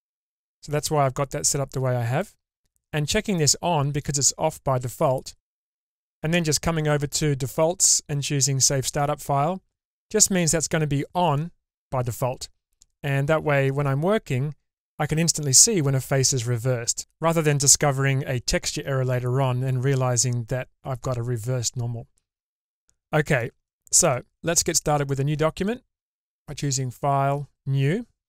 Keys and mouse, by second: 4.6-6.8 drag, 7.4-10.0 drag, 10.5-20.0 middle drag, 22.7-23.3 middle drag, 23.7 shift+middle click.